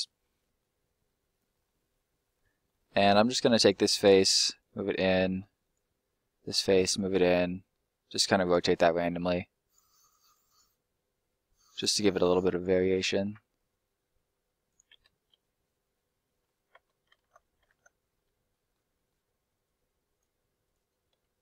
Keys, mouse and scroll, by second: 0.5 middle click, 1.4 scroll up 1, 1.6 middle click, 2.6 scroll up 1, 2.6 middle click, 3.6 right click, 3.8 middle click, 4.5 click, 5.6 right click, 6.5 click, 8.4 click, 8.6 middle click, 9.6 right click, 10.3 r, 11.6 click, 12.4 right click, 12.8 r, 14.7 click, 15.0 scroll down 1, 15.2 middle click, 17.2 ctrl+z, 17.6 ctrl+z, 18.0 scroll up 1, 18.4 middle click, 19.6 click, 20.6 right click, 21.1 s.